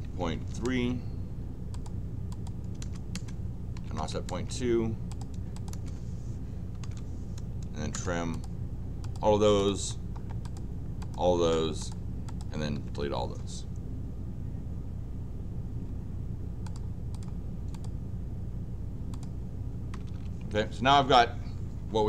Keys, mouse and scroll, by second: 1.7 click, 2.3 click, 5.1 click, 5.5 click, 6.5-7.3 typing, 7.9 Return, 8.3 click, 9.1 click, 9.6 click, 10.4 click, 11.0 click, 11.3 Return, 11.8 click, 12.2 click, 16.6 click, 17.1 click, 17.7 click, 19.1 click, 19.9 Escape, 20.0 Escape, 20.2 Escape.